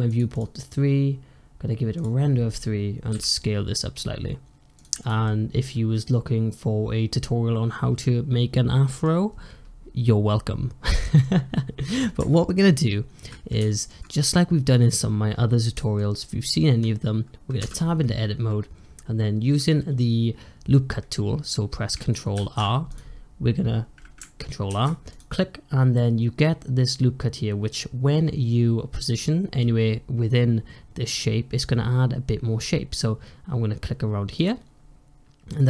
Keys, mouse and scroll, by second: 3.0 s, 4.9 drag, 5.1-8.1 middle drag, 11.1-12.1 middle drag, 13.6-14.1 shift+middle drag, 14.1 click, 15.2-15.9 scroll up 1, 15.9-17.5 shift+middle drag, 17.5 Tab, 22.2 ctrl+r, 24.6 ctrl+r.